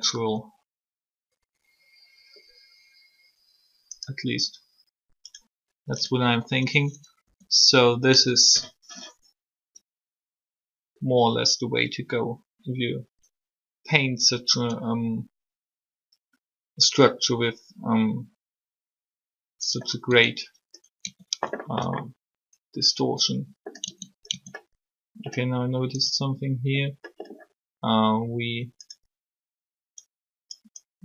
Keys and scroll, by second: 7.2 r, 20.0 Tab, 21.0 Tab, 23.8 Tab, 24.3 Tab.